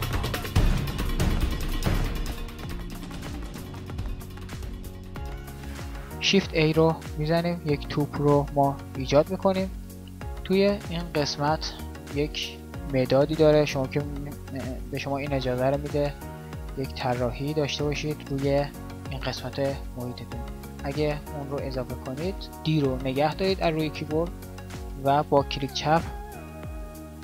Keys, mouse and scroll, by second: 0.1 n, 1.2 KP_5, 1.3 KP_1, 6.7 shift+a, 10.1 n, 26.9 d.